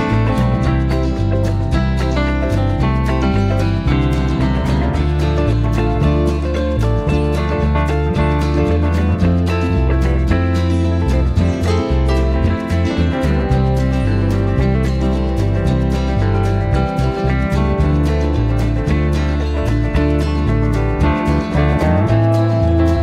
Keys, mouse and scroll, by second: 1.0 click, 2.3 click, 4.2 ctrl+shift+click, 5.6 ctrl+shift+click, 8.6 click, 9.8 KP_Subtract, 11.2 click, 11.7 space, 13.2 KP_Subtract, 14.4 space, 16.9 KP_Subtract, 18.3 click, 20.2 ctrl+g, 21.8 ctrl+d.